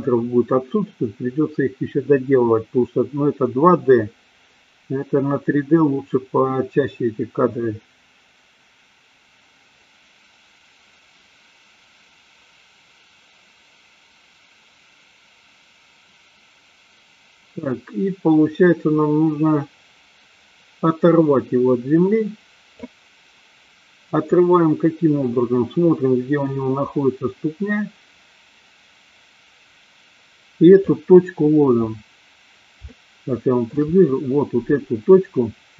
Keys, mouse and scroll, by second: 25.4-31.3 drag, 33.0-33.6 shift+middle drag.